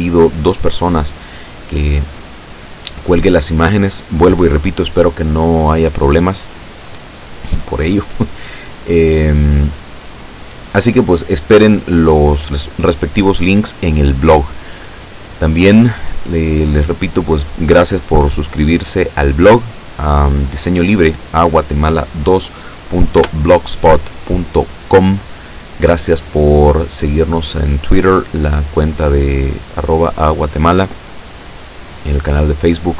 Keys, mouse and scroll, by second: 23.2 Tab.